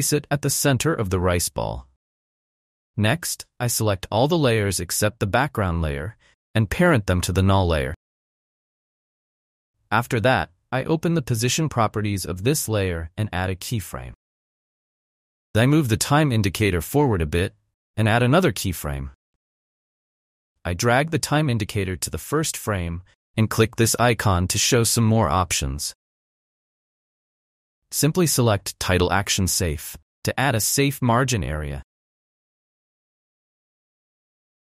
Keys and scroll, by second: 2.3 space.